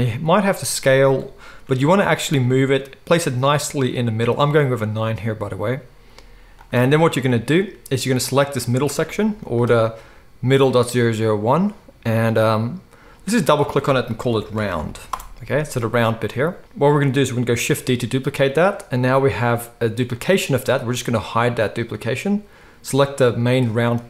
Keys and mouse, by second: 0.1 s, 1.6 g, 2.1-8.2 shift+middle drag, 8.2 click, 8.3-13.2 middle drag, 9.0 g, 13.2 click, 13.3 middle click, 13.3-21.8 drag, 17.7 shift+d, 21.8-24.0 middle drag.